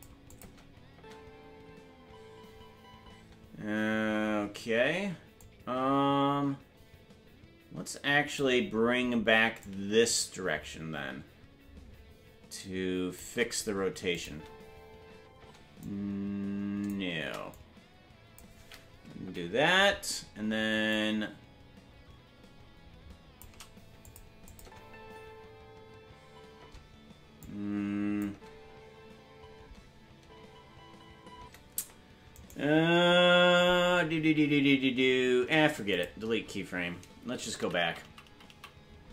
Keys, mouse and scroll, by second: 0.3 click, 0.9 space, 5.4-8.4 drag, 5.4 space, 9.6-13.2 shift+drag, 14.1-15.5 drag, 14.4 space, 15.5 space, 15.8-16.9 drag, 17.5 click, 19.2 Left, 20.9-23.4 drag, 24.0 click, 24.4-26.5 drag, 24.6 space, 27.4 click, 27.4 space, 28.3 space, 31.5 space, 32.3 right click, 35.3 Delete, 38.1 ctrl+z.